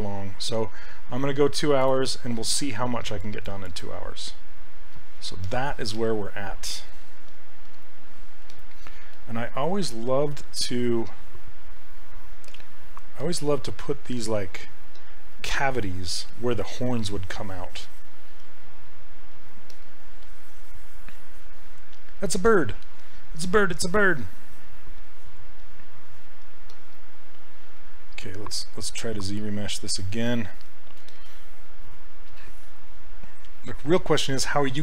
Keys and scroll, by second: 7.2 s.